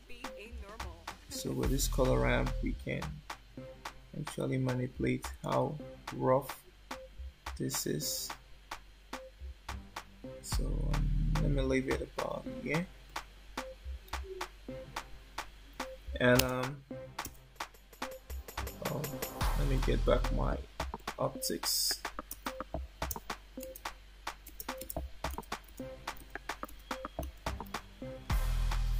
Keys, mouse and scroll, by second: 1.2 click, 13.0 click, 16.3 space, 17.2 space, 19.8 click, 22.2 space, 23.7-27.7 typing.